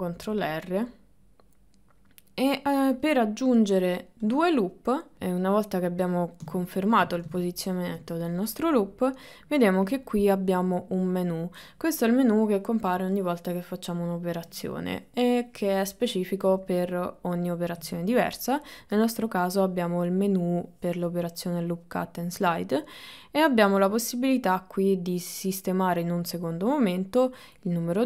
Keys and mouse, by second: 6.7 shift+middle click, 7.4 ctrl+middle click.